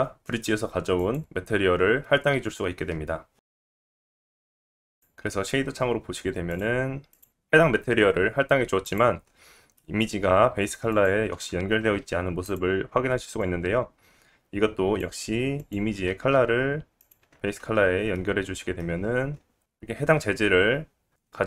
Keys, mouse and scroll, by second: 4.8 scroll up 3, 5.0 middle click, 5.2 middle click, 5.5-8.8 middle drag, 6.5-7.2 scroll up 2, 8.8 click, 9.2 scroll up 2, 9.7 middle click, 10.9 click, 12.0 g, 12.3-15.8 right drag, 13.4-15.8 drag, 13.4-15.8 middle drag, 16.3 g, 17.7-19.6 right drag, 17.7-18.2 scroll down 3, 18.1 middle click, 19.3 scroll up 2, 19.9 right click, 19.9 scroll up 2.